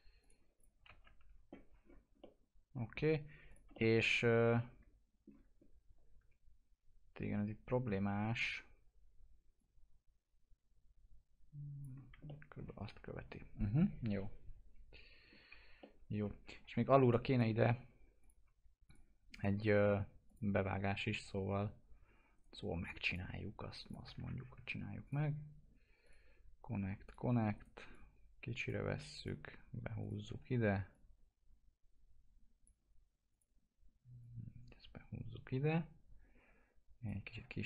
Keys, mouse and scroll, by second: 0.2 click, 0.8 alt+x, 1.8 scroll down 1, 2.1 alt+middle click, 2.9-3.4 scroll up 1, 3.4 click, 3.7 alt+middle click, 5.5-6.1 scroll up 1, 6.1 e, 9.5 click, 11.9 scroll down 1, 12.2 alt+middle click, 12.8 F4, 13.6-14.7 scroll up 1, 15.7 alt+middle click, 16.6 F4, 16.7-17.2 scroll up 1, 17.2 click, 19.3 right click, 20.2 click, 22.3 right click, 23.0 click, 25.0 ctrl+click, 27.5 right click, 27.8 click, 30.2 w, 30.8-33.3 drag, 37.4 1.